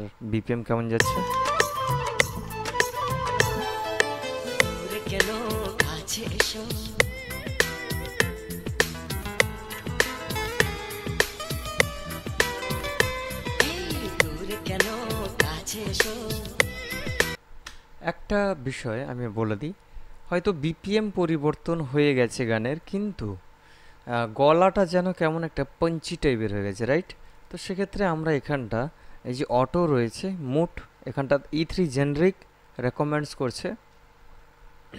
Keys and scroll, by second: 1.2 space, 17.6 space.